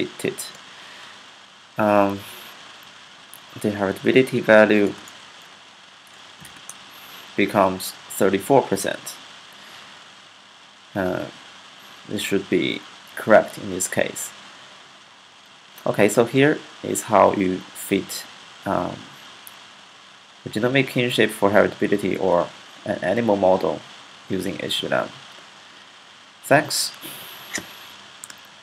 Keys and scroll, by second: 2.6 Up, 3.0 Up, 3.9 Up, 5.8-6.8 typing.